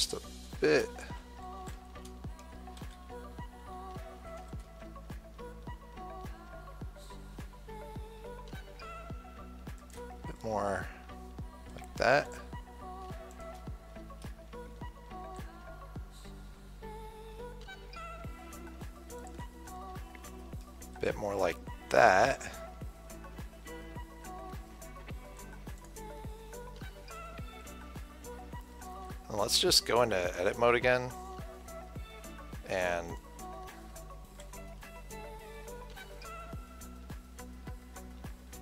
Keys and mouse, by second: 0.9 s, 12.6-15.4 drag, 15.6 s, 26.1-28.6 drag, 26.6-28.6 right drag, 29.3 Tab, 30.7 Tab, 31.4 Tab, 33.4-36.8 drag, 34.7 s.